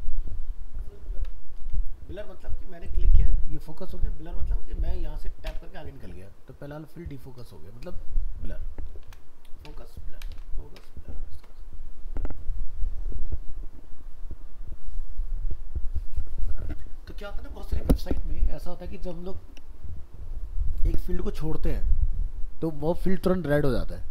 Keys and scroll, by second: 1.6 alt+Tab.